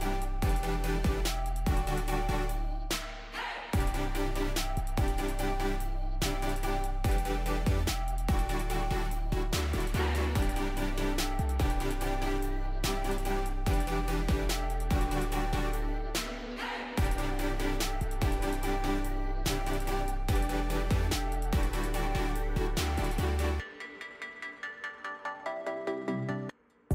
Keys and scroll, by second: 7.5 d, 10.5 a, 18.0 s, 18.9 w, 19.8 e.